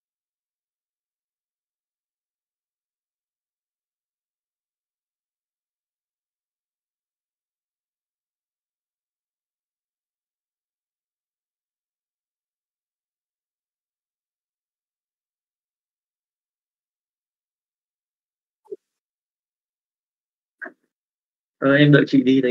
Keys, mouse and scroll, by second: 15.3-16.4 drag, 17.0 click, 20.0 middle click.